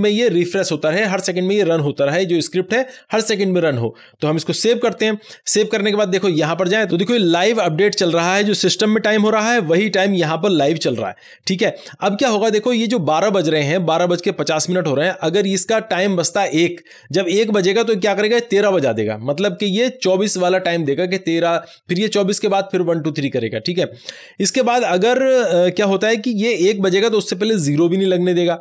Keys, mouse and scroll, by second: 4.3 ;, 4.6 ctrl+s.